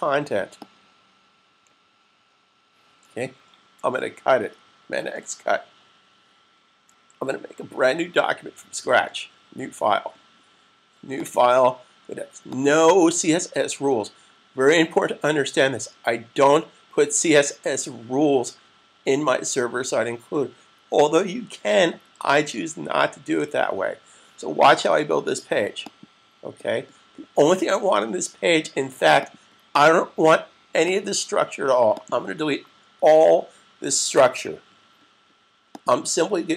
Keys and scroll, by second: 4.7 super+x, 7.7 super+n, 32.5 super+a.